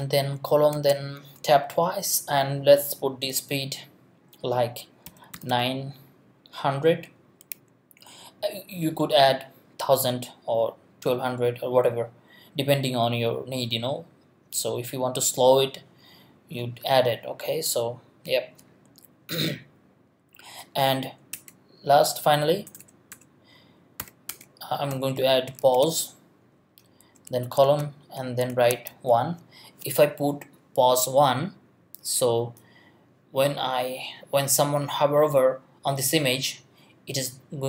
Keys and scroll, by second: 0.0-0.1 typing, 0.7 Tab, 5.1 9, 5.3 0, 21.3 Return, 22.7 BackSpace, 24.0-27.0 typing, 24.3 Return, 27.6 shift+Tab.